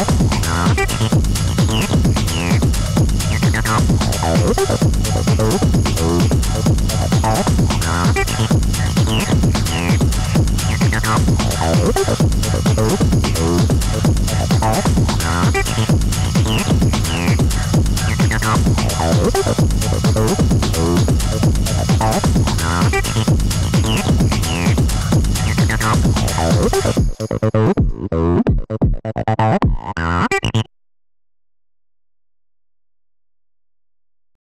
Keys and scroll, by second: 7.1 2, 7.2 Return, 27.1 3, 27.4 ], 30.5 4.